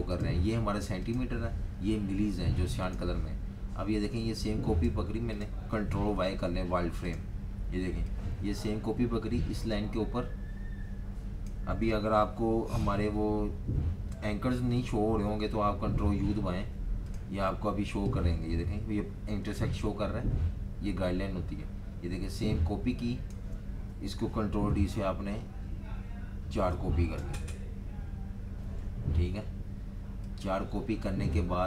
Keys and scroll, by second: 6.2 super+y, 12.4 super+z, 16.1 super+u, 25.2 super+d, 25.7 super+d, 26.5 super+d.